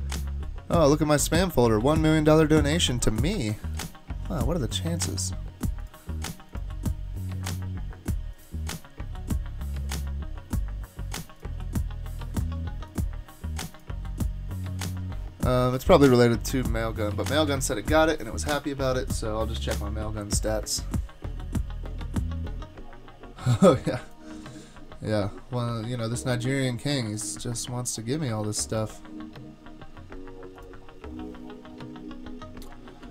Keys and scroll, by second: 32.9 super+k.